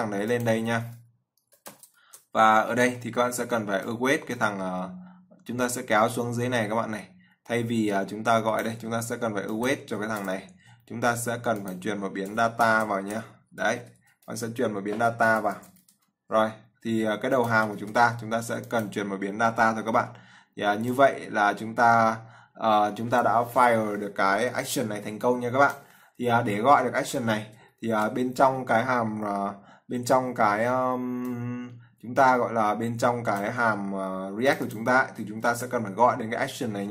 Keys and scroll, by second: 2.3 ctrl+v, 13.3 ctrl+v, 28.0 ctrl+s, 35.7 ctrl+c.